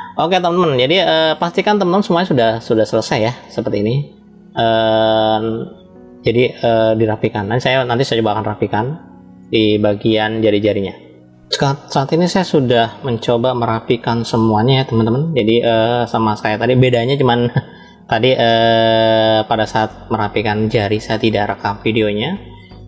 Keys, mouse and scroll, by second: 0.4 shift+middle click, 2.6 shift+middle click, 3.3-5.1 middle drag, 5.7 scroll down 2, 6.5 shift+middle click, 11.3-13.2 middle drag, 14.6 middle click, 15.9 shift+middle click, 18.0-19.2 middle drag, 22.0-22.8 shift+middle drag.